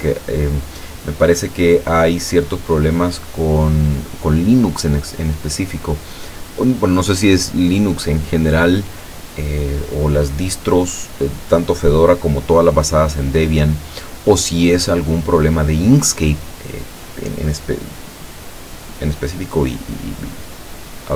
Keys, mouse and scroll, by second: 0.7 click, 4.0 click, 14.8 click.